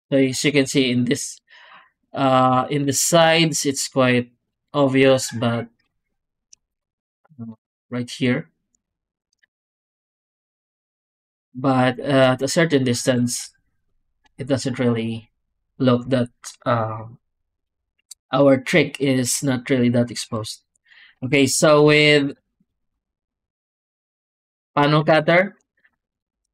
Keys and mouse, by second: 0.1 drag, 1.1 middle click, 2.1 middle drag, 7.5-8.5 d, 7.6 click, 8.9 alt+shift+z, 9.6-10.4 d, 9.7 click, 10.8 alt+shift+z, 12.5 click, 21.2 alt+shift+z, 21.7 click, 22.1 x, 22.6 click, 22.8 Tab, 23.3 z, 24.1 shift+click, 24.9 alt+a, 25.9 shift+click, 26.2 2.